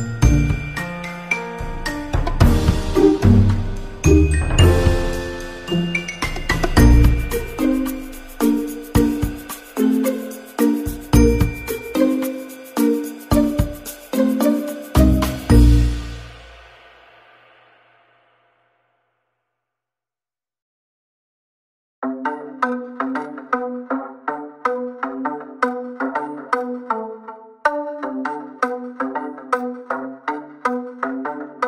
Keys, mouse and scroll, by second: 0.9 click, 1.5 click, 2.7 click, 3.7 click, 4.6 scroll up 1, 5.0 middle click, 6.6 click, 12.8-13.8 scroll up 3, 16.2 scroll down 1, 18.0 middle click, 19.1 scroll down 1, 19.5 middle click, 21.0 middle click, 29.7 space, 30.6 scroll up 1.